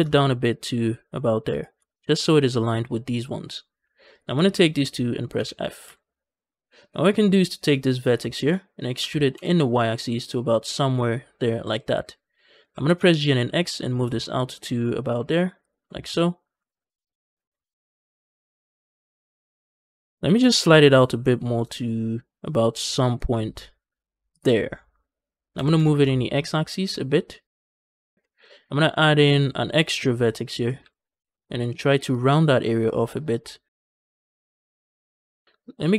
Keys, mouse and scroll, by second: 1.4 shift+click, 4.0 click, 4.4 shift+click, 5.2 f, 5.7 a, 5.9 a, 7.4 click, 8.1 shift+middle click, 8.8 e, 9.2 y, 11.5 click, 12.5 g, 12.7 g, 12.8 x, 15.5 shift+click, 15.9 z, 16.4 g, 16.8 c, 16.9 x, 19.1 shift+click, 19.7 g, 20.1 g, 20.2 g, 20.5 c, 24.2 click, 25.4 g, 25.6 x, 27.6 shift+click, 28.1 shift+middle click, 28.8 ctrl+r, 30.3 click, 30.6 g, 30.9 x, 34.3 shift+click.